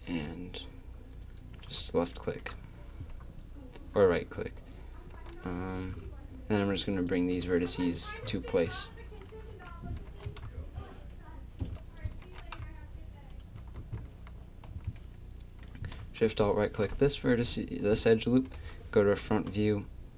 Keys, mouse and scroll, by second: 1.2 right click, 5.1 g, 9.2 click, 9.5 z, 10.1 g, 11.6 click, 12.2 g, 13.0 click, 13.8 a, 14.7 z, 18.4 KP_1.